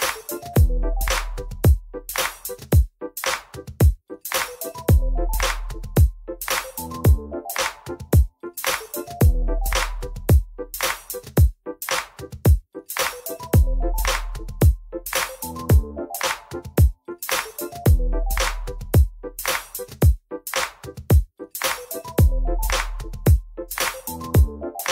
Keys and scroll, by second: 5.0 ctrl+r, 9.1 F4, 16.3 w, 16.9 alt+x, 18.6 alt+x, 21.9 alt+x.